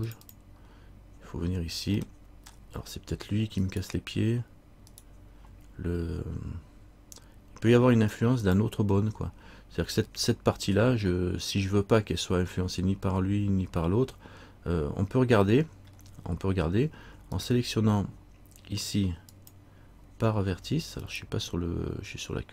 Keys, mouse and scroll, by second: 2.2 middle click, 3.8 right click, 15.7 middle click, 16.4-17.5 scroll up 2, 17.5 right click, 19.5 click, 21.2 right click.